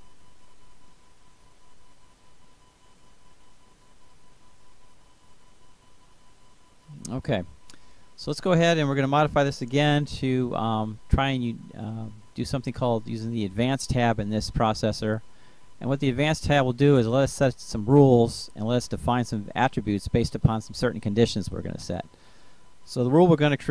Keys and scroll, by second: 0.9 Delete, 20.8-22.8 typing.